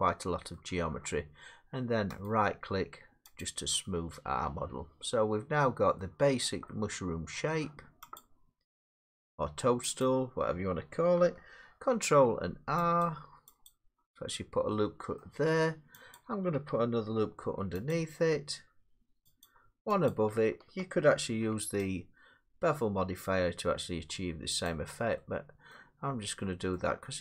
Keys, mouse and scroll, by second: 0.6 middle click, 2.3 right click, 3.4 click, 6.0 middle click, 6.3-6.7 scroll, 6.7 middle click, 7.5 middle click, 8.2 click, 9.1 Tab, 10.0 click, 11.4 scroll, 11.9 ctrl+r, 12.2 scroll, 13.0 click, 13.7 click, 15.2 middle click, 16.2 click, 17.4 ctrl+r, 17.9 click, 19.5 click, 20.1 click, 21.2 ctrl+r, 21.8 click, 24.7 click, 25.8-26.3 scroll, 26.8 scroll.